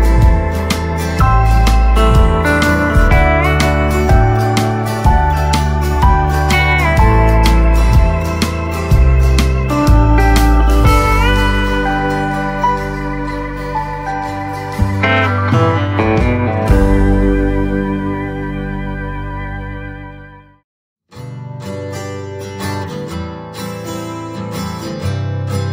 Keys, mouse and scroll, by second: 2.5-6.1 right drag, 6.1 click, 9.9 click, 12.3 right click, 12.3 typing, 13.0 click, 13.4 right click, 14.6 scroll down 1, 15.2 right click, 16.3 scroll up 1, 17.4 click, 20.1 ctrl+z, 20.3 click, 20.8-21.4 scroll up 1, 21.6 click.